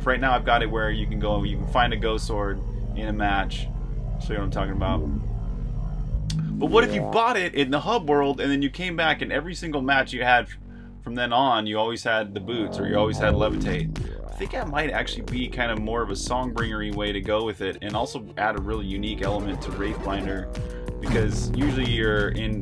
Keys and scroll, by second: 0.0-5.1 typing, 6.8-7.6 typing, 13.6-16.8 typing, 18.2-19.2 typing, 20.8 typing, 22.0-22.6 typing.